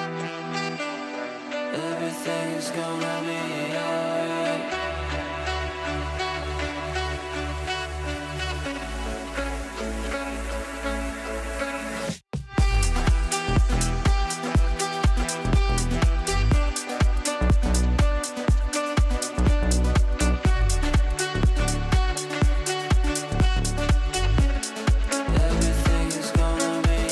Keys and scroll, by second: 12.8 q, 16.8 f.